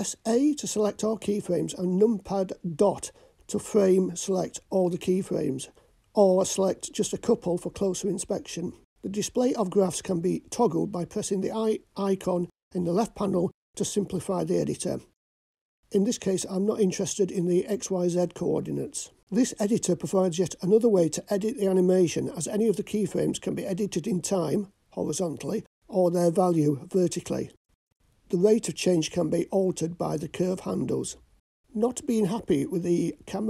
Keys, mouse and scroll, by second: 1.4 click, 2.5 click, 3.6 click, 7.0-10.3 drag, 10.0 KP_Decimal, 11.5-15.1 scroll down 1, 31.5-32.1 scroll down 4.